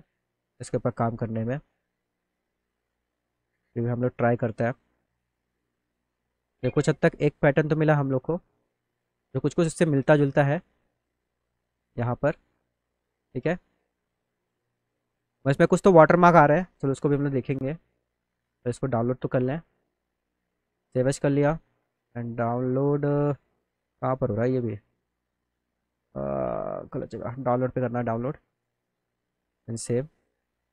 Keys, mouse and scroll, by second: 0.0 click, 1.7 click, 4.5 click, 6.5 right click, 8.1 click, 8.3 click, 9.5 click, 9.9 click, 10.1 scroll down 2, 10.9 scroll down 2, 16.9 click, 17.5 click, 18.7 click, 19.0 right click, 19.9 click, 21.6 click, 24.0 click, 25.7 middle click, 25.9 middle click, 26.1 middle click, 26.3 middle click, 26.6 middle click, 26.8 middle click, 27.0 middle click, 27.3 middle click, 27.7 middle click, 27.9 middle click, 28.2 middle click, 28.6 click, 29.4 click, 29.6 click.